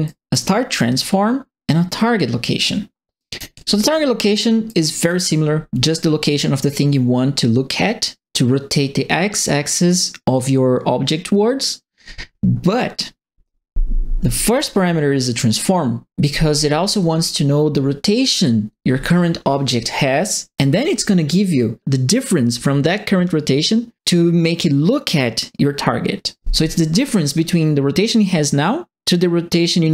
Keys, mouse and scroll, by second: 0.0 right click, 3.1 right click, 3.5 middle click, 4.6 right click.